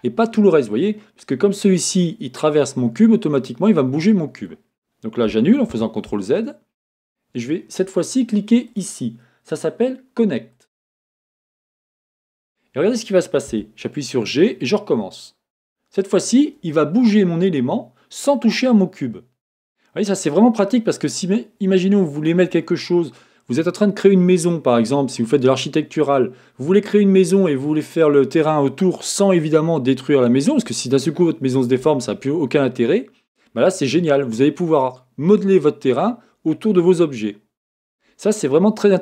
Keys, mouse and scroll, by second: 8.7-16.6 drag, 13.6 g, 16.6-20.3 middle drag, 22.2-39.0 middle drag.